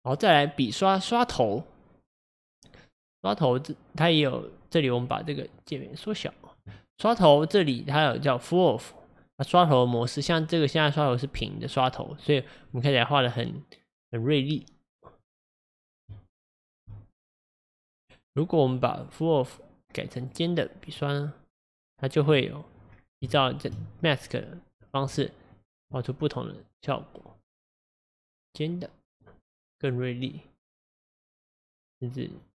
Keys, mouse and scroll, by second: 5.5-8.6 drag, 8.6-11.8 drag, 12.7-16.1 drag, 16.1 f, 16.7 f, 16.8 f, 17.2-22.2 drag, 22.2-22.9 scroll up 6, 22.9-23.3 scroll down 3, 23.3-24.2 shift+middle drag, 24.2-24.7 scroll down 4, 25.5-32.5 drag.